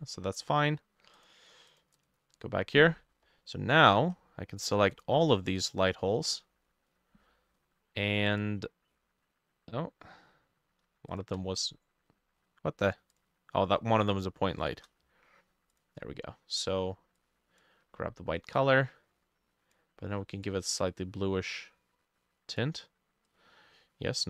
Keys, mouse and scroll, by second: 2.0 double click, 3.2-3.7 scroll down 3, 4.2-7.6 drag, 4.2-4.7 scroll up 2, 4.7-6.2 shift+middle drag, 10.3-13.4 drag, 10.3-10.9 scroll down 1, 10.9 shift+middle click, 13.8-15.1 shift+drag, 13.8 scroll up 2, 14.1-15.1 shift+middle drag.